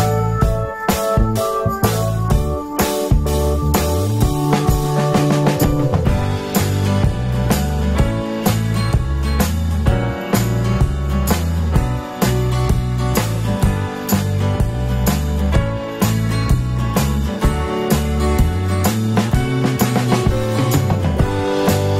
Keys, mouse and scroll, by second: 0.3 F3, 0.3 click, 0.9 F3, 2.2 F3, 2.2 click, 3.0 alt+middle click, 4.9 alt+F3, 5.0 alt+middle click, 10.2 alt+middle click, 18.1 alt+middle click.